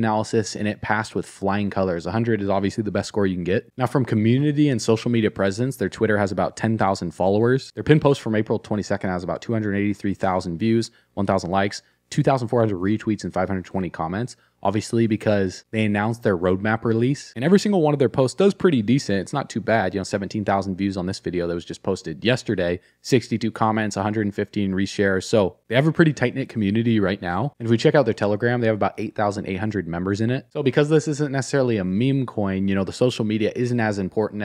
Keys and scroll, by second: 27.5 alt+q.